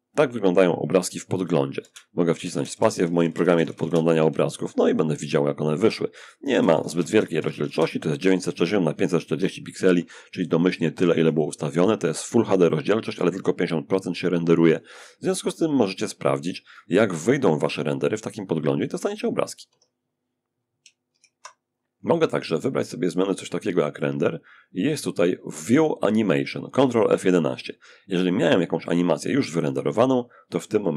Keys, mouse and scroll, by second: 1.0 space, 1.5 space, 1.7 space, 3.8-5.4 alt+right drag, 4.5 alt+click, 5.7 alt+space, 9.5-11.1 scroll up 2, 15.2-16.6 scroll up 2, 18.9 Escape, 20.3 ctrl+d, 22.4 click, 23.0-28.7 scroll up 2, 28.7 click, 30.4-30.9 alt+drag.